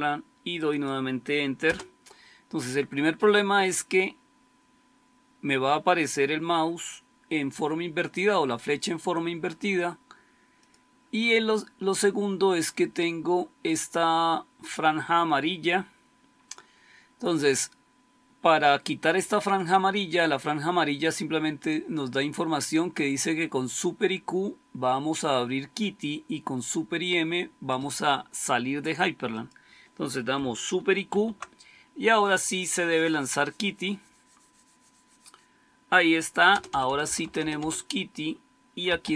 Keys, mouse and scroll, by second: 1.5 Return, 10.6-30.9 drag, 30.9 super+q, 36.4 Return, 36.6 Return, 36.7 Return, 36.9 Return, 37.2 Return, 37.3 Return, 37.5 Return, 38.5-39.1 typing.